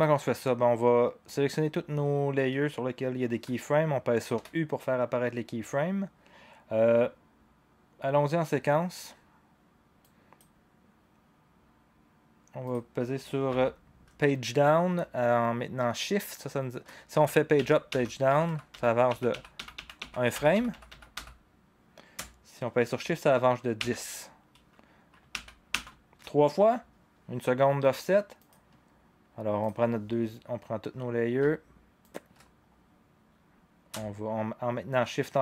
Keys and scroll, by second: 4.3 u, 17.1 Page_Down, 17.5 Page_Down, 17.9 Page_Down, 18.3 Page_Up, 18.4 Page_Up, 18.7 Page_Up, 19.1 Page_Down, 19.3 Page_Down, 19.6 Page_Down, 19.7 Page_Down, 20.0 Page_Down, 20.3 Page_Up, 20.5 Page_Up, 20.7 Page_Up, 20.9 Page_Up, 21.1 Page_Up, 23.8 shift+Page_Down, 25.3 shift+Page_Down, 25.7 shift+Page_Down.